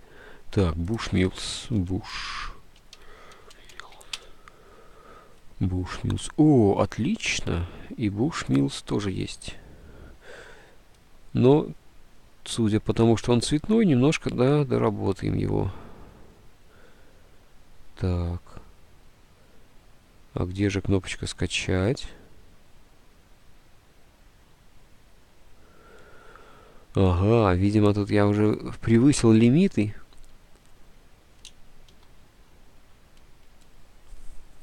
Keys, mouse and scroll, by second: 1.9-4.5 typing, 6.1-6.9 typing, 32.0 ctrl+r.